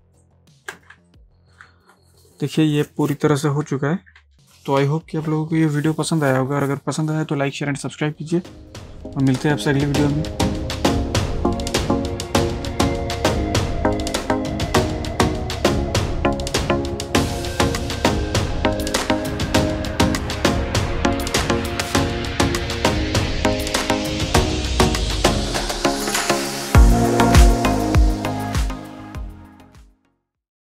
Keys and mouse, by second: 1.0 ctrl+space, 1.1 ctrl+click, 1.5 ctrl+space, 1.7 ctrl+space, 4.2 ctrl+space.